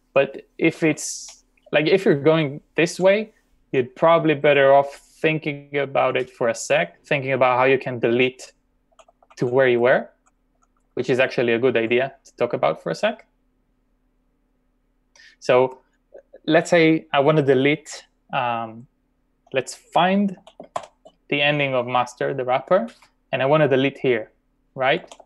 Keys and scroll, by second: 1.2-2.2 typing, 9.0 typing, 13.6-14.6 typing, 20.4-20.8 typing, 25.1 typing.